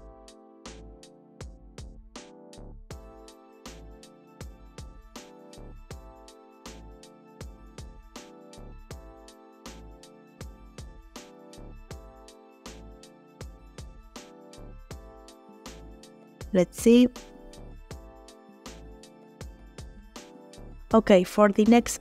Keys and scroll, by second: 3.0 g, 8.8 g, 13.2 g, 16.4 space, 20.2 space.